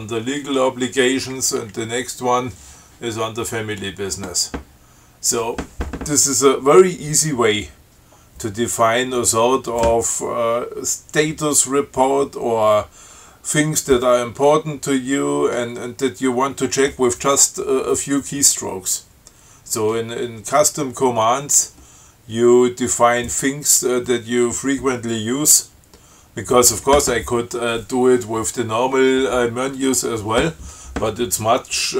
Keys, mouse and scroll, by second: 1.8 Down.